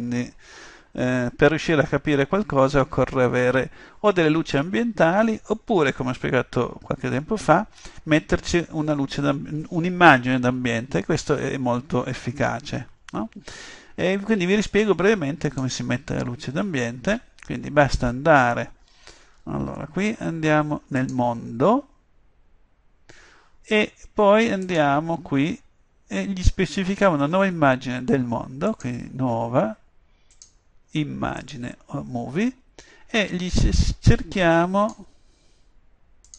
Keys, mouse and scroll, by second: 0.0 Escape, 14.7-18.8 drag, 21.0-26.5 drag, 28.8-32.3 drag, 33.6-35.4 drag, 36.3 click.